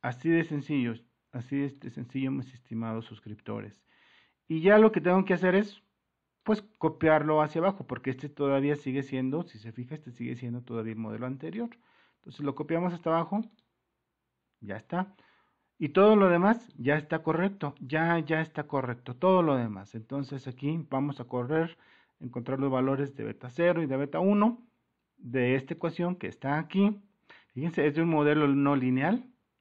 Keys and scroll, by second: 4.3 Return, 4.4 super+-, 21.7 1, 22.2 Return, 22.8 1, 23.4 Return, 25.8 typing.